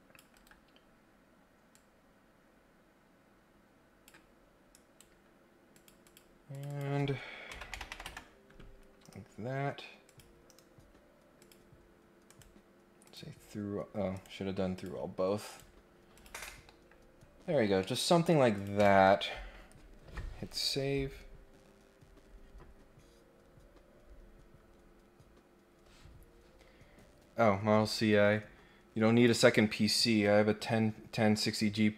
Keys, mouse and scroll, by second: 0.3 Escape, 1.7-4.1 drag, 4.7 right click, 5.7 click, 6.0 click, 6.5 click, 10.1 click, 11.4 click, 12.3 right click, 13.0 click, 14.1 right click, 14.7 click, 15.5 right click, 16.1 click, 16.4 middle click, 16.7 scroll up 1, 16.8-17.5 scroll down 3, 17.7 scroll up 1, 17.8 scroll down 1, 18.5 click.